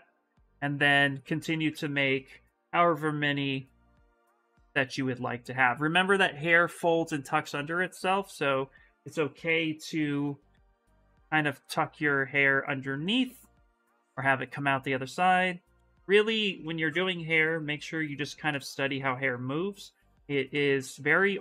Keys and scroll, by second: 0.4 s, 8.8-10.2 typing.